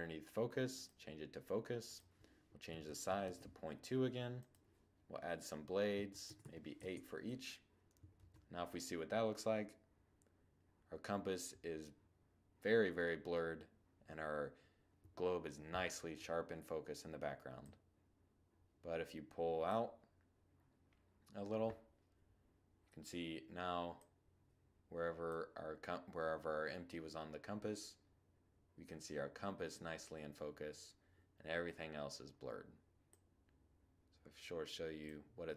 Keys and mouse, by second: 0.0-7.0 drag, 7.0 shift+z, 16.3-18.1 drag, 22.8-24.6 drag, 31.9-33.6 drag, 35.0-35.5 drag.